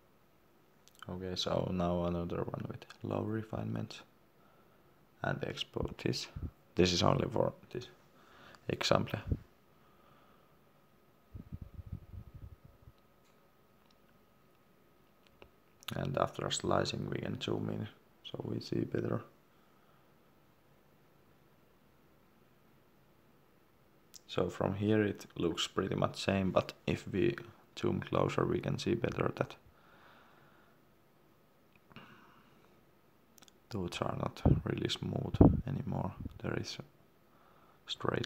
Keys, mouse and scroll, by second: 25.7 middle click, 26.4 scroll down 1, 26.8 scroll up 1, 27.9 middle click, 28.8 shift+middle click, 29.6 ctrl+middle click, 30.1 middle click, 30.2 middle click, 30.6 ctrl+middle click, 31.7-32.0 scroll down 1, 32.0-32.9 scroll up 1, 32.9-33.5 scroll down 1, 33.5 middle click, 34.0-34.3 scroll down 1, 34.3-35.5 scroll up 1, 35.5-36.0 scroll down 1, 36.0 middle click, 37.1 ctrl+middle click.